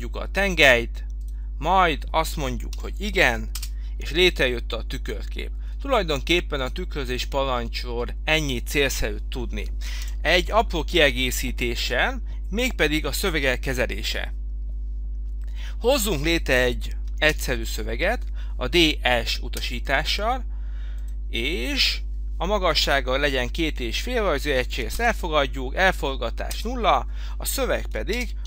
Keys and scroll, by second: 2.7 i, 3.6 Return, 10.1 Delete, 19.6 Return, 25.1 Return, 28.1-28.4 typing.